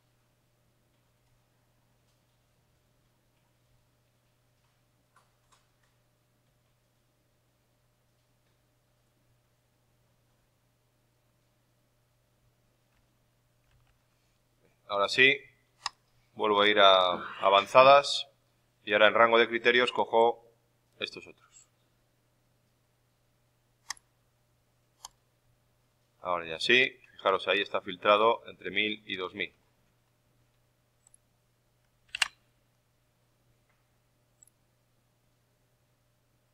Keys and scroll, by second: 12.9 alt+Tab, 13.6 alt+Tab, 32.1 ctrl+Down.